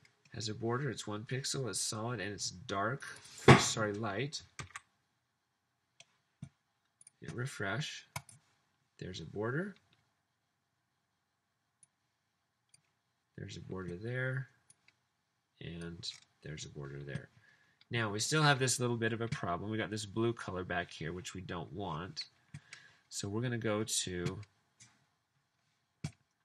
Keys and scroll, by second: 4.8 super+s.